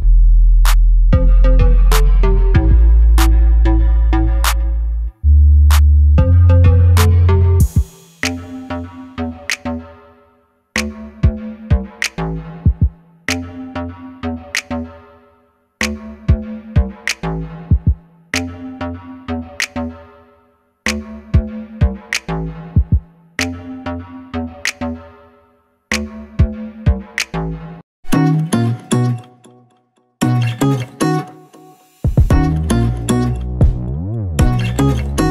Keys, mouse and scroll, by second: 0.8 Escape, 1.3 click, 2.9 click, 3.3 g, 4.4 click, 4.9 |, 6.2 click, 6.6 e, 8.7 click, 9.1 i, 11.0 click, 11.2 e, 12.8 click, 13.1 s, 16.9 click, 17.7 i, 21.7 Escape, 22.1 KP_Decimal, 22.6 i, 23.4 click, 23.6-24.0 scroll down 1, 24.0 middle click, 24.6 Tab, 24.7 click, 24.8 scroll down 2, 25.0-28.8 middle drag, 26.2-26.7 scroll down 2, 26.7 KP_3, 27.8 KP_1, 28.4-28.8 scroll down 2, 28.8 click, 29.2 shift+d, 30.8 click, 31.1 KP_7, 32.1 ctrl+click, 32.3-32.9 scroll down 1, 32.9 shift+click, 33.6 shift+z, 33.8 scroll up 1, 34.3 click.